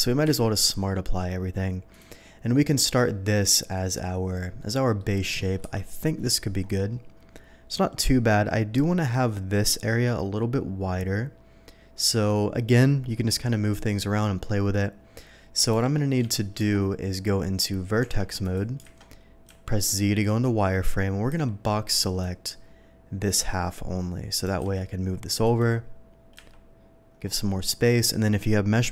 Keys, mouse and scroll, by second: 0.2 q, 1.9 click, 2.5 middle drag, 3.3 middle drag, 4.2-4.6 scroll down 1, 4.6-4.9 middle drag, 5.6 KP_7, 7.4-8.2 middle drag, 12.4 middle click, 13.5-14.0 middle drag, 15.7 g, 16.3 Escape, 16.7 Tab, 18.4 click, 18.8 alt+a, 19.4 z, 21.3 b, 22.2-23.2 drag, 24.5 g, 24.7 x, 25.4 click, 26.3 z, 26.7 middle click, 27.2 middle click, 27.5-28.9 middle drag.